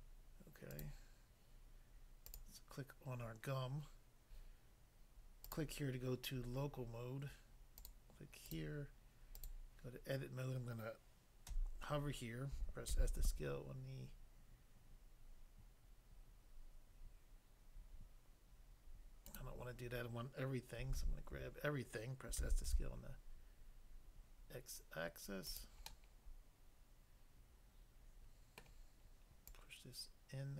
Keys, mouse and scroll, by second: 0.7 click, 0.9 click, 2.3 click, 2.4 click, 5.5 click, 5.5 click, 6.4-6.8 scroll up 1, 7.8 click, 7.9 click, 8.5 click, 8.6 click, 9.4 click, 9.5 click, 11.4 l, 12.9 typing, 19.3 right click, 20.9-21.3 typing, 25.5 click, 25.6 click, 25.9 middle click, 28.7 middle click, 29.5 click.